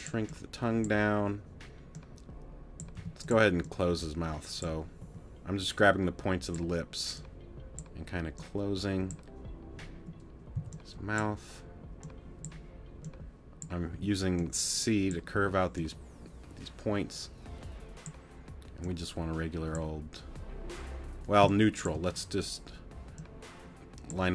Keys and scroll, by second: 3.0 t, 5.0 t, 10.5 c, 13.9 t, 15.3 t, 21.4 space.